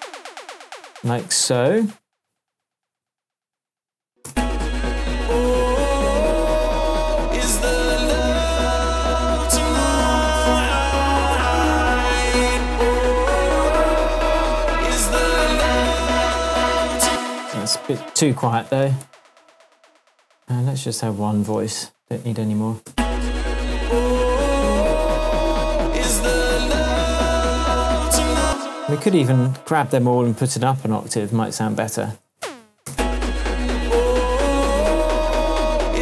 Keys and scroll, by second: 0.2 space, 3.5 space, 17.0 space, 18.8 0, 19.0 Return, 22.9 space, 28.4 space, 32.0 super+a, 32.3 shift+super+Up, 32.9 shift+space, 34.7 shift+Tab.